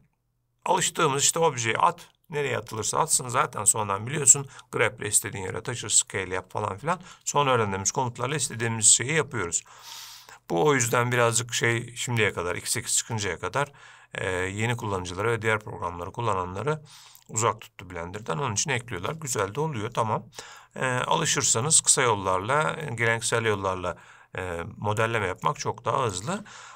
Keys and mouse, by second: 13.9-15.0 middle drag, 21.2-22.1 middle drag, 25.6-26.3 middle drag.